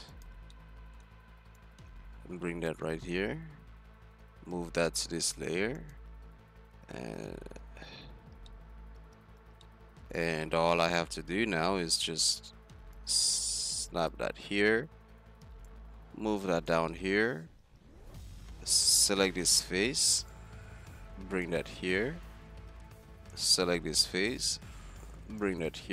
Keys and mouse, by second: 0.3 z, 2.8 z, 4.4 m, 7.2 `, 7.7 z, 9.0 z, 9.4-10.0 middle drag, 9.4 z, 14.1-15.4 drag, 15.4-15.8 middle drag, 15.8-17.4 drag, 17.4 Tab, 17.6 z, 18.1 a, 18.7 right click, 19.2 z, 22.1 middle click, 22.7 z, 23.7-24.9 drag, 23.7 z, 25.5 click.